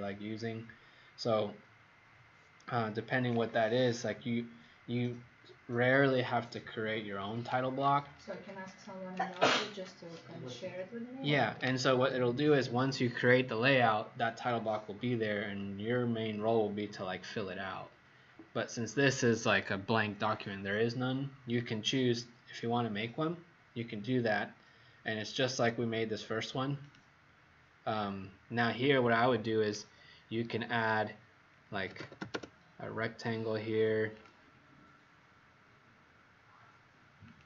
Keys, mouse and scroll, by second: 28.9-29.8 scroll up 1, 29.8 scroll down 2, 31.6-32.6 typing, 34.1 click.